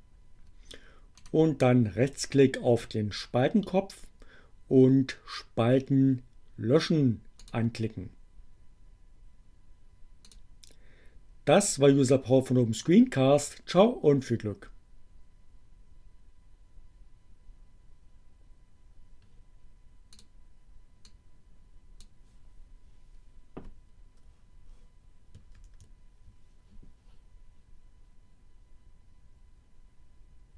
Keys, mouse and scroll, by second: 0.2-1.5 right drag, 6.1-7.7 drag, 9.8 click, 20.0 click, 20.7-22.0 drag, 24.6 ctrl+-.